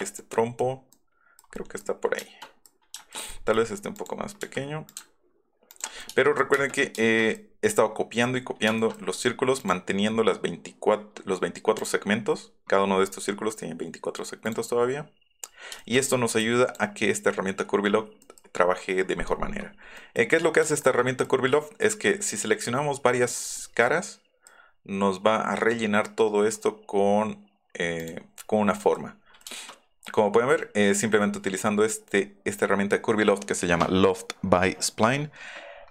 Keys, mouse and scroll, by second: 0.0 space, 0.2 middle click, 0.9 middle click, 1.4 middle click, 1.8 middle click, 3.3 middle click, 4.0 click, 4.4 s, 4.9-6.0 ctrl+drag, 6.5 space, 8.8 shift+middle click, 9.6 click, 11.8 click, 14.5 click, 14.6 Up, 15.8 shift+click, 16.5 click, 17.2 middle click, 18.2 click, 18.5 `, 20.0 middle click, 20.9 shift+click, 22.5 Up, 23.6 middle click, 24.5 middle click, 28.8 click, 29.3 middle click.